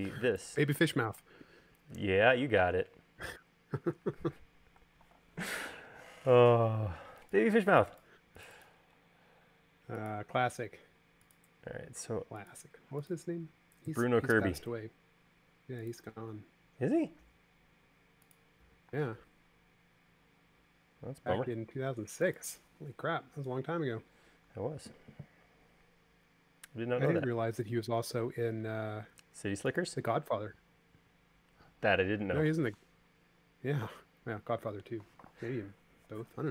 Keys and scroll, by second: 4.3-4.9 typing, 9.1 l, 19.1 space.